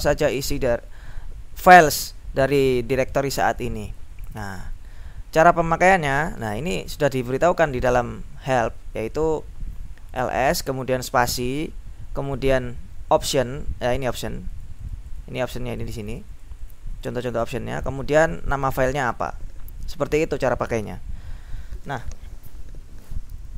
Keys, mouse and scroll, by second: 1.8-2.5 scroll up 2, 3.6-4.2 scroll up 2, 4.2-5.0 scroll up 1, 6.5-7.4 scroll up 2, 7.7-8.4 scroll up 2, 10.2-11.0 scroll up 2, 11.4-12.2 scroll up 2, 12.3-13.9 scroll up 2, 14.2-15.2 scroll up 2, 15.8 click, 16.8-18.1 drag, 18.3-19.7 drag.